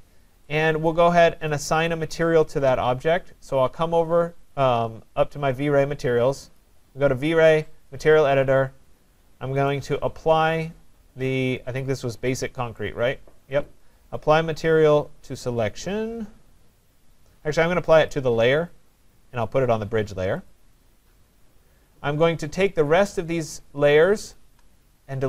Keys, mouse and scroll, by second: 0.0-0.6 typing, 0.5 click, 1.5 click, 4.5 click, 6.7 click, 8.0 click, 9.7 click, 12.8 right click, 18.1 click, 20.5 click, 23.1 click, 24.4 shift+click.